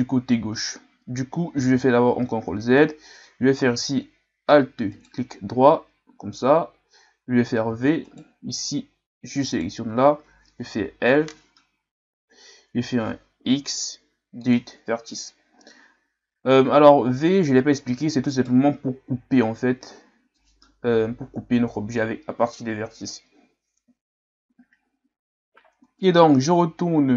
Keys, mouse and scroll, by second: 1.6 ctrl+z, 2.5-3.0 scroll down 2, 5.0 alt+right click, 7.7 v, 9.5 right click, 10.7 l, 13.5 Delete, 18.3 alt+right click, 25.7 Tab, 26.7-27.0 ctrl+scroll up 1.